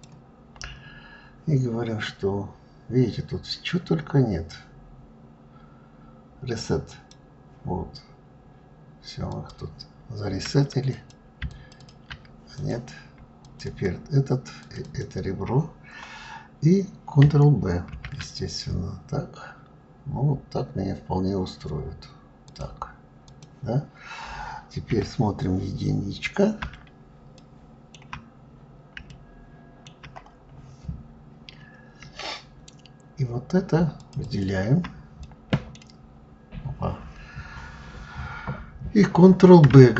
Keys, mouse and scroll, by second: 6.6 click, 9.0 click, 10.6 click, 11.2 ctrl+click, 11.5 ctrl+click, 12.2 click, 13.1 shift+click, 13.4 shift+click, 14.3 shift+click, 14.5 shift+click, 22.9 click, 24.6 KP_1, 25.6-27.1 scroll up 2, 27.1 shift+middle click, 28.0 scroll up 2, 28.8-31.8 shift+middle drag, 33.7 shift+click, 33.9 shift+click, 34.9 middle click, 35.8-39.2 scroll down 4.